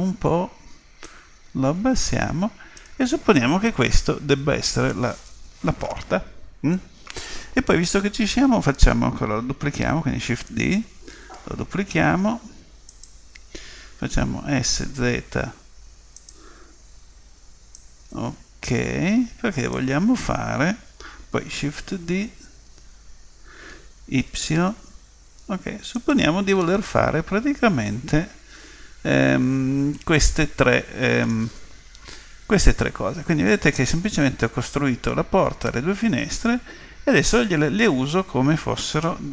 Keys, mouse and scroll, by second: 1.0 click, 10.4 shift+d, 14.5 s, 17.8 click, 21.7 shift+d, 26.6-28.6 middle drag, 32.1 KP_3.